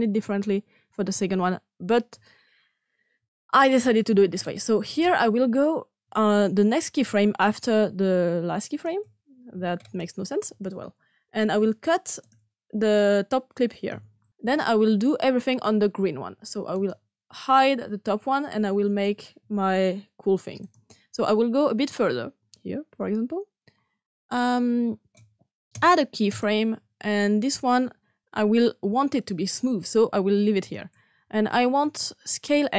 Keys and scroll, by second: 11.4 x, 13.8 s.